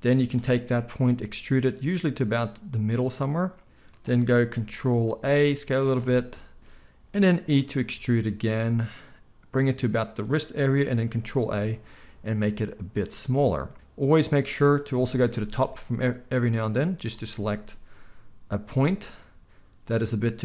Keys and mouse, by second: 1.1 e, 4.0-16.4 middle drag, 5.0 ctrl+a, 7.8 e, 11.4 ctrl+a, 14.9 KP_7, 16.4-20.4 drag, 18.7 z.